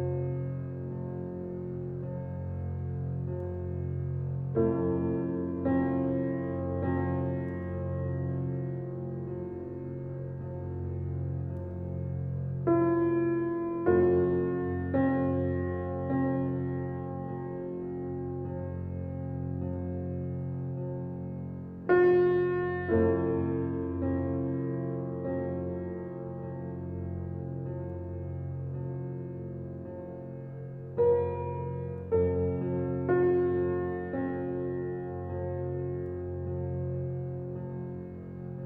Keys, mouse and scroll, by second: 0.1 scroll up 1, 1.0-1.5 scroll down 1, 2.9-4.9 drag, 4.7-8.6 typing, 9.8-11.9 drag, 11.9 right click, 12.4-12.8 scroll up 1, 13.6 click, 14.9 scroll down 1, 16.2 scroll up 1, 17.2 click, 17.6 scroll down 1, 18.2-18.9 scroll up 1, 19.0 click, 20.9-21.3 scroll down 1, 21.3 scroll up 1, 22.0 click, 22.0 typing, 22.3 scroll down 1, 22.8-23.4 scroll up 1, 23.4 click, 23.8 scroll down 1, 26.5 click, 26.5 typing, 28.3-28.8 scroll down 1, 28.8-29.6 scroll up 1, 29.6-33.4 drag, 33.4 click.